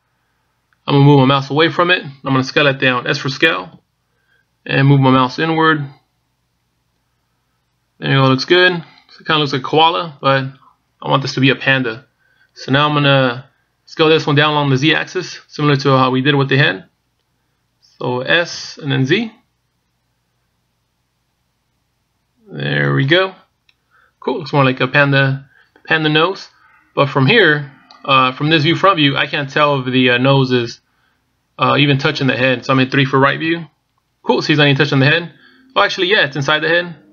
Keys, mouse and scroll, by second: 5.3 s, 19.4 s, 24.8-25.6 scroll up 1, 25.6 scroll up 2, 26.3-26.9 scroll down 1, 34.2 KP_3.